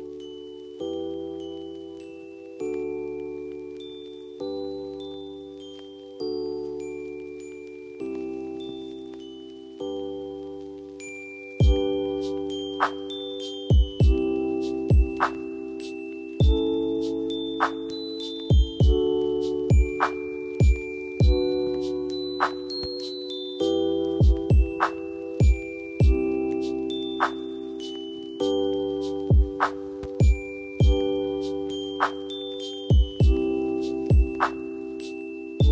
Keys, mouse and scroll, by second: 1.0 click, 6.2 ctrl+z, 7.2-7.8 drag, 8.8 ctrl+g, 10.0 shift+click, 12.4 c, 13.1 click, 15.2 shift+click, 16.0 shift+click, 18.3 shift+click, 19.4 b, 20.2 click, 21.1 F4, 22.3-22.9 drag, 29.5 F2, 29.9-31.1 drag, 34.7-35.7 drag.